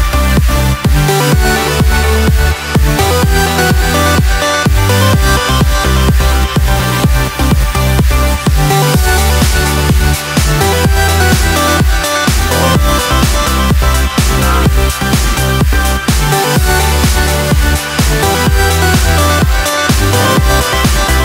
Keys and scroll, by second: 19.3 ctrl+t.